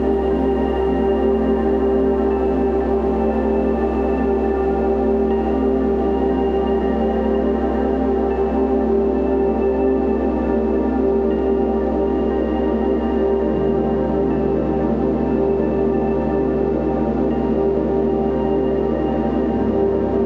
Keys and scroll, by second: 6.5 b, 7.7 ], 13.5 v, 14.7 space, 16.7 space.